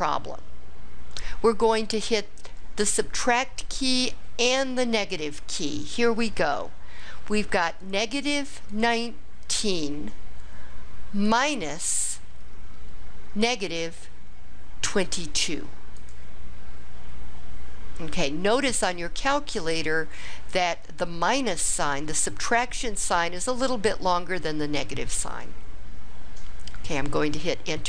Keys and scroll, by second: 8.7 1, 9.6 9, 11.2 -, 14.9 2, 16.4 2.